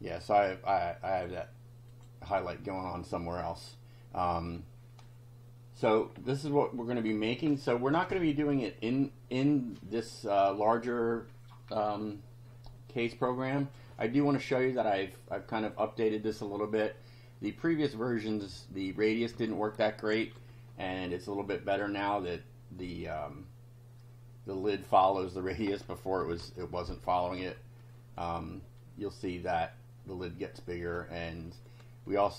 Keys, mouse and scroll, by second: 1.9 click, 5.1-6.1 drag, 6.4 click, 13.1 click, 18.5 click, 19.3 2, 20.3 F5, 21.3 click, 26.2 BackSpace, 26.4 3, 27.4 F5.